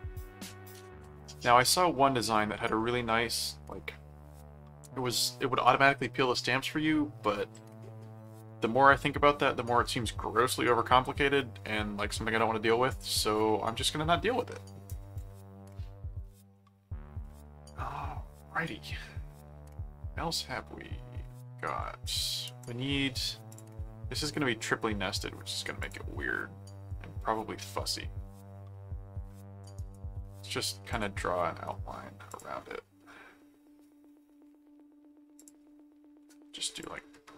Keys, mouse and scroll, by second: 15.7 middle click, 16.5 middle click, 17.2-21.4 middle drag, 21.6 middle click, 22.6 click, 23.5 click, 25.8 click, 29.8 right click, 30.9 click, 32.3 click, 35.3 click, 36.7 click.